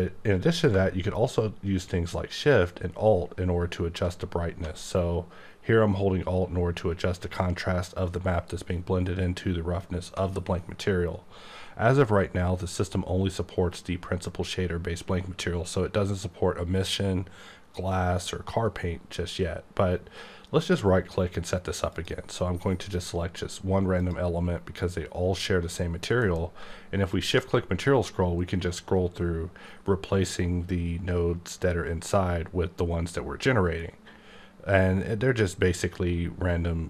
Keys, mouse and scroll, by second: 21.9 click, 24.0 click, 26.2 alt+m, 27.1 shift+click, 27.6-28.8 scroll up 4, 28.8-29.8 scroll up 1, 29.8-30.9 scroll up 2, 30.9-31.7 scroll up 1, 31.7-32.4 scroll up 1, 32.4-33.2 scroll up 1, 33.2-34.6 scroll up 2, 34.6-35.9 scroll up 2, 35.9-36.8 scroll up 2.